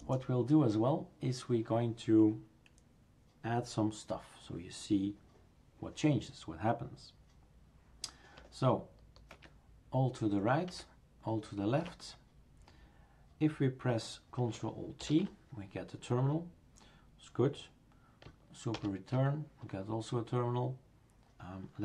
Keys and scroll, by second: 9.3 alt+Right, 10.7 alt+Left, 15.0 ctrl+alt+t, 18.7 super+Return.